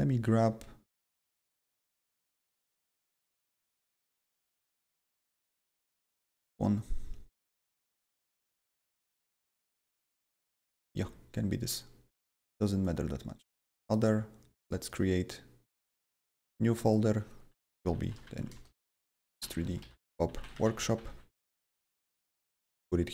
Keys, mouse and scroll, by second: 1.4 click, 1.6 double click, 3.5 click, 6.0 click, 6.1 double click, 10.1 click, 10.9 ctrl+c, 13.8 click, 13.9 double click, 14.6 click, 14.8 right click, 16.8 click, 17.5-21.6 typing, 21.7 Return, 22.2 ctrl+v.